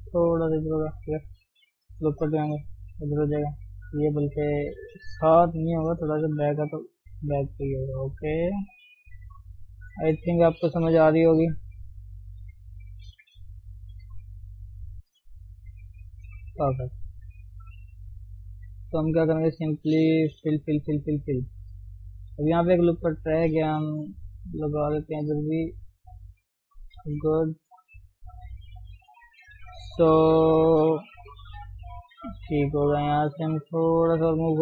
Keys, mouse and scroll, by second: 0.7-1.7 shift+middle drag, 1.7 ctrl+r, 2.7 g, 3.8 click, 6.5 g, 7.8 click, 8.4 shift+middle click, 9.0 g, 10.0 click, 11.0 g, 11.7 click, 12.2 click, 13.5 g, 14.3 click, 15.5 g, 16.5-17.8 middle drag, 17.8 scroll down 1, 17.9-18.9 shift+middle drag, 18.9 click, 19.9 middle click, 20.5-21.0 f, 21.2 f, 21.6-22.8 middle drag, 22.8 click, 23.9 g, 25.4 ctrl+r, 27.0 KP_3, 28.3 ctrl+KP_1, 29.5 g, 30.3-31.2 scroll up 3, 31.2 g, 32.5 click, 33.7 g.